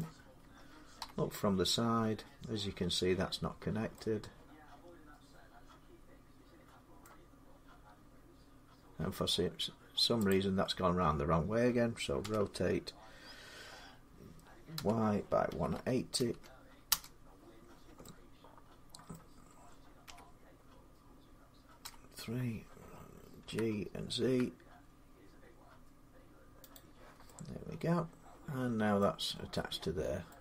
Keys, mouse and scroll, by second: 0.8 3, 2.0-2.8 scroll, 6.8 middle click, 10.1 click, 12.0 r, 12.1-15.2 drag, 14.6-17.1 typing, 16.7 Return, 18.4-20.6 typing, 18.9 middle click, 20.1-24.1 middle drag, 21.7 3, 23.3-25.0 typing, 26.6-28.7 drag, 28.7 z, 28.8 middle click, 29.0 scroll down 4, 30.1 middle click, 30.3 scroll down 1, 30.3 scroll down 2.